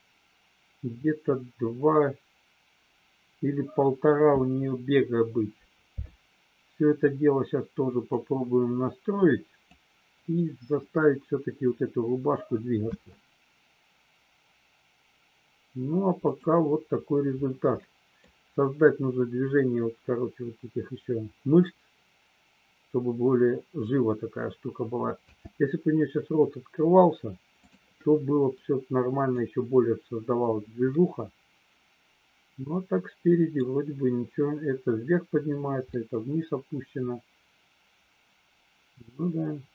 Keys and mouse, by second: 8.1-9.8 drag, 12.8 space, 16.2 click, 17.8-18.2 middle drag, 25.2 space, 28.5 middle click, 30.9-33.5 middle drag, 35.9-39.7 middle drag.